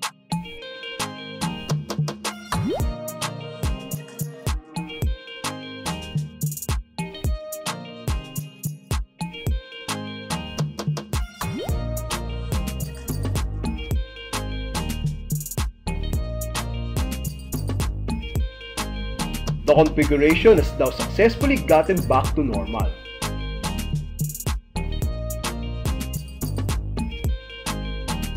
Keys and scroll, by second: 3.0 Return, 7.6 alt+d, 10.5 alt+d, 13.8 super+r, 17.1 Return.